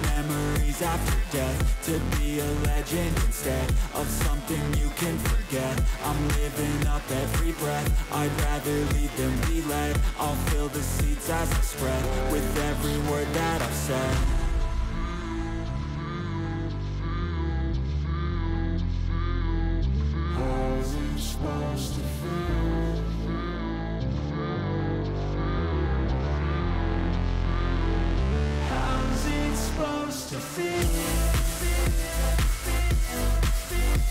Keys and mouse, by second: 0.5 click, 1.5 click, 2.3 click, 4.3-5.5 drag, 4.3-5.5 right drag, 9.1 click, 9.1 right click, 10.4 click, 10.4 right click, 11.2 click, 11.2 right click, 11.5 middle click, 12.0 middle click, 12.3 click, 13.0 click, 13.4 click, 13.9 click, 14.4 click, 17.2 click, 17.8 click, 18.6 click, 19.3 click, 20.0 click, 20.8 click, 21.3 click, 22.4-24.0 drag, 24.9 click, 25.7 click, 25.7 click, 26.7 click, 27.1 click, 27.2 click, 28.1 click, 28.1 middle click, 28.5 click, 29.3 click, 29.8 click, 29.9 click, 30.7 click, 32.2 click, 32.2 click, 32.8 click, 33.2 click, 33.3 click.